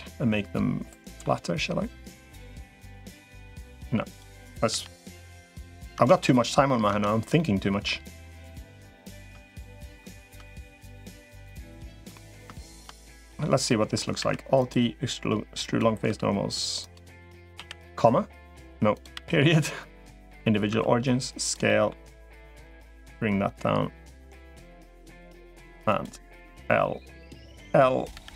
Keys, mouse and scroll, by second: 2.4 middle click, 3.9 click, 4.5 l, 5.1 click, 5.7 Tab, 6.7 Tab, 7.1 middle click, 8.1 middle click, 10.3 middle click, 11.7 shift+click, 11.9 middle click, 12.5 shift+click, 12.8 middle click, 13.5 middle click, 14.1 alt+e, 15.9 s, 17.3 ,, 20.5 s, 21.5 middle click, 22.5-24.1 drag, 24.3 middle click, 25.2 middle click, 25.7 click, 26.3 l, 27.9 l.